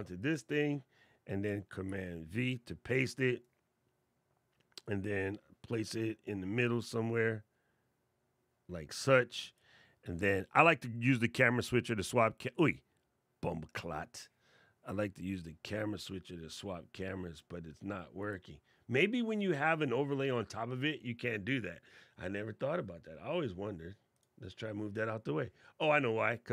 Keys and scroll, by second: 1.5 super+v.